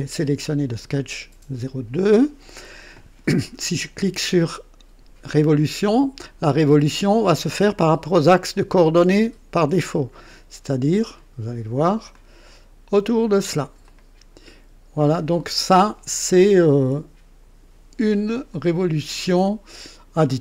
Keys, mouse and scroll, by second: 12.1 click, 13.9-17.8 drag, 18.5 click.